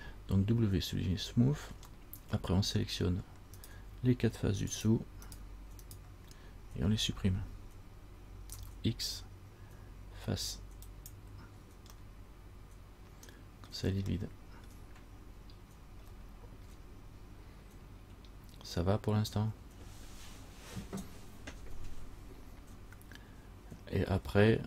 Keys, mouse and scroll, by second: 2.2 middle click, 2.2 scroll up 1, 2.5 scroll down 1, 3.8 right click, 4.9 shift+right click, 5.4 shift+right click, 6.1 right click, 8.7 x, 12.1 scroll up 1, 12.2 middle click, 13.9-14.2 scroll down 1, 14.4 middle click, 14.4 scroll up 1, 14.9-16.3 scroll down 1, 16.4 shift+middle click, 16.4 shift+scroll up 1, 16.8 shift+scroll down 1, 18.3-19.6 scroll up 3.